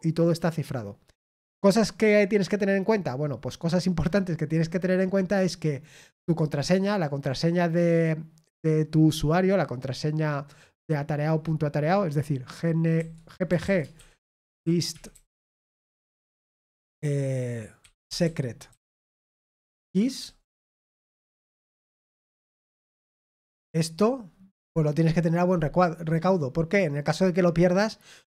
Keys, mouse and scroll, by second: 20.7 typing.